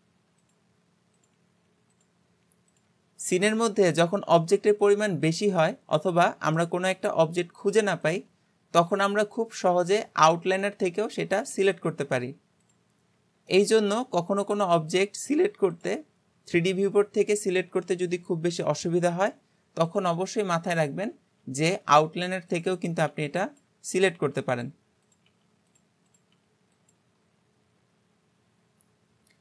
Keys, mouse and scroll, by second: 0.8 scroll down 2, 1.2 click, 2.0 click, 2.3 g, 3.3 scroll down 1, 3.6-4.1 middle drag, 4.1 alt+z, 4.4-7.4 middle drag, 7.7 click, 8.1 click, 9.9 click, 10.5 click, 11.5 g, 12.7 click, 13.1-13.5 scroll down 2, 13.5-14.0 middle drag, 14.0 g, 14.9 click, 15.3 g, 19.9 click, 20.7 click, 21.5 g, 22.5 click, 23.1 g, 23.9 click, 24.1 g, 25.1 click, 25.3 g, 26.1 click, 26.3 g.